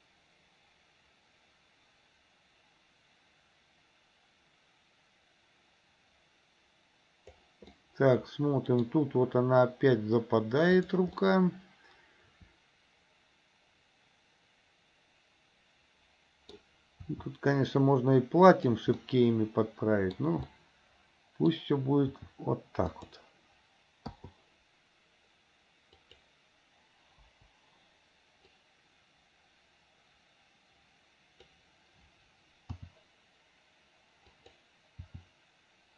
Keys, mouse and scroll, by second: 7.9-9.0 middle drag, 10.8 click, 11.4-16.7 middle drag, 17.1 r, 19.1-20.4 middle drag, 20.7-21.7 middle drag, 22.3 r, 24.3 i, 26.0 click, 27.4 Delete, 28.7-31.7 drag, 32.9 r, 35.2 r.